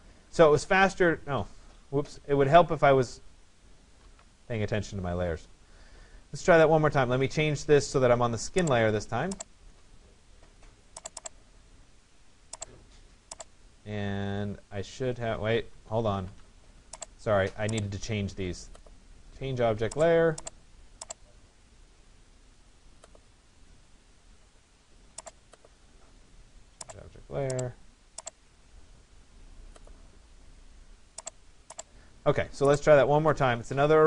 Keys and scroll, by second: 3.7 ctrl+z, 15.8 ctrl+z.